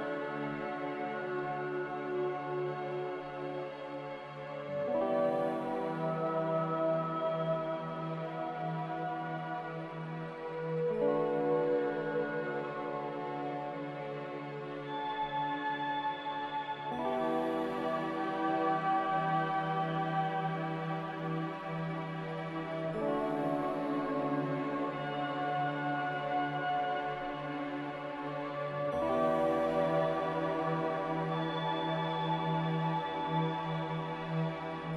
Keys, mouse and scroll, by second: 0.9 ctrl+z, 1.2 ctrl+z, 8.1 x, 13.8 click, 16.9 s, 21.0 Caps_Lock, 22.1 a, 27.6 ctrl+c, 27.8 ctrl+v, 29.8 ctrl+g.